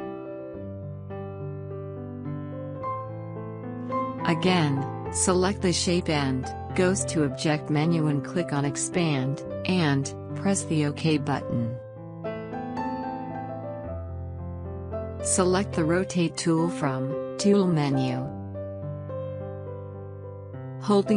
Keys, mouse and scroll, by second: 0.6-4.8 drag, 7.6-9.9 drag, 18.3 click.